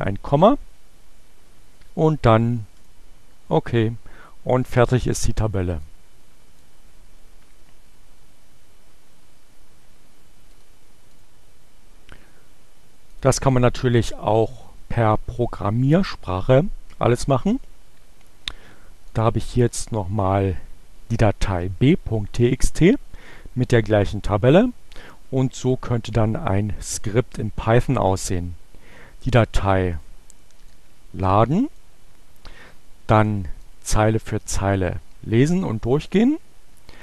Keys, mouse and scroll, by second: 2.2 click, 5.8 click, 8.9-10.8 right drag, 11.1 click, 13.1 click, 19.2 click, 25.7 click, 30.6-31.8 drag, 33.0 click, 33.5-34.6 drag, 35.7 click.